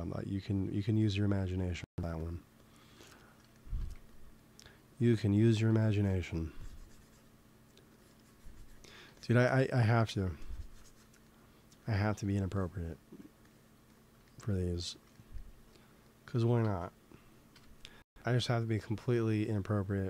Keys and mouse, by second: 1.6-2.8 middle drag, 2.1-3.8 drag, 3.0 middle click, 3.0 right click, 3.8 f, 5.4-12.2 drag, 6.2 f, 12.4-14.2 drag, 14.4-16.5 drag, 16.5 ctrl+s, 17.4 KP_1.